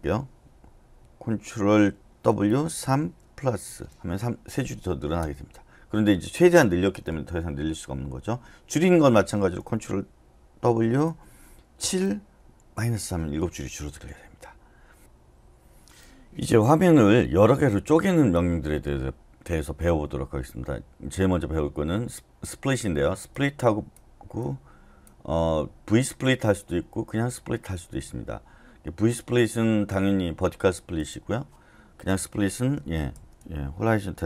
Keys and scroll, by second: 2.3 ctrl+w, 2.8 typing, 5.2 Return, 10.6 ctrl+w, 11.8-12.7 typing.